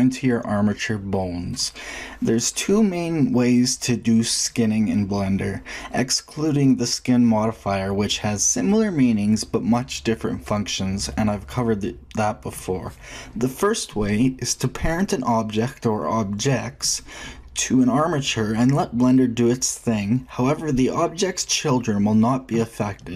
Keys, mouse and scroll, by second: 10.0-11.3 middle drag.